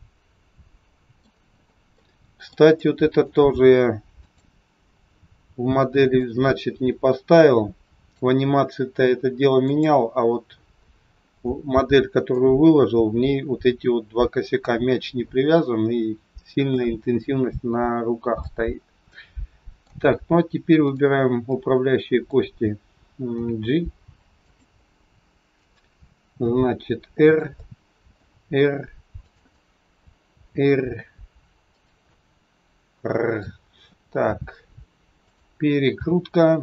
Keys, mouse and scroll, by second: 2.0 middle click, 2.7 shift+middle click, 4.2 click, 6.1 click, 9.6 click, 11.0-11.4 scroll down 5, 12.4 click, 12.4 scroll down 5, 18.5 middle click, 20.9 click, 21.4 middle click, 23.3 g, 25.0 middle click, 26.2 r, 27.5 middle click, 28.2 r, 29.5 middle click, 30.3 r, 32.1 middle click, 35.5 r.